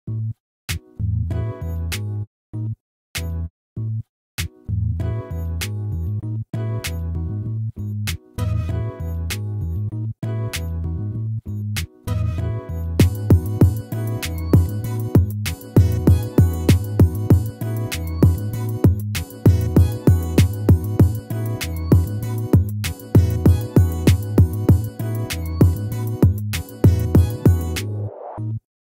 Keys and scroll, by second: 2.1 ctrl++, 5.0 ctrl+z, 11.4 ctrl+z, 15.2 ctrl+-, 19.1 ctrl+z, 28.0 ctrl+-.